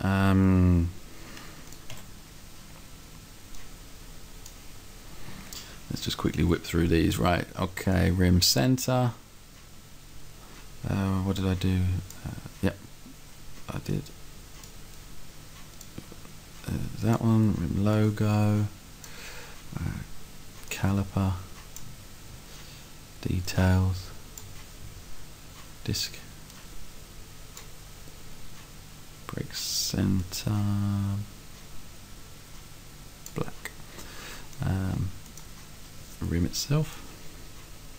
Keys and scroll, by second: 2.1 s.